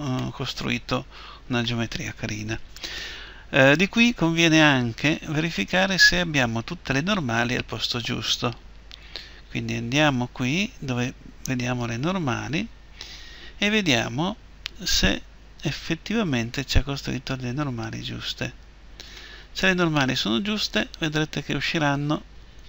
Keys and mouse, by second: 0.1 middle click.